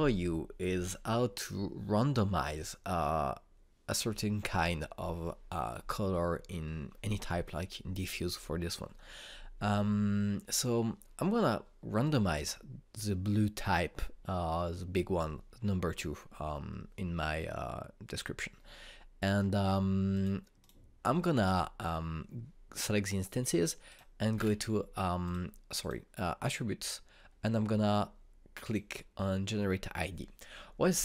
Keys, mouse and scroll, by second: 12.7 click, 20.8 click, 24.5 click, 25.0-25.9 scroll down 1, 25.9 click, 29.3 click.